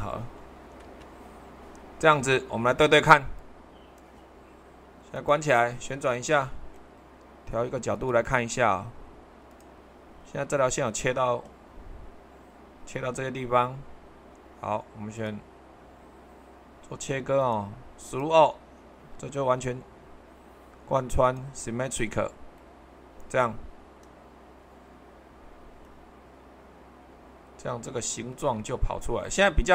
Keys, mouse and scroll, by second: 5.1-6.2 drag, 6.7 middle click, 7.9-9.1 drag, 9.5-12.7 drag, 15.1-16.2 drag, 17.3-19.2 drag.